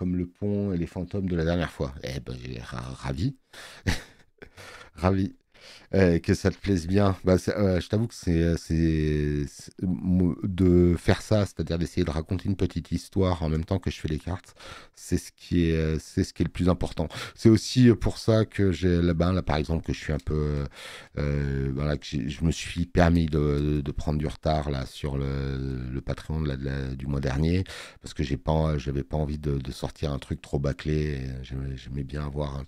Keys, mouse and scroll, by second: 7.6 space, 7.8 click, 31.0 space, 31.2 click.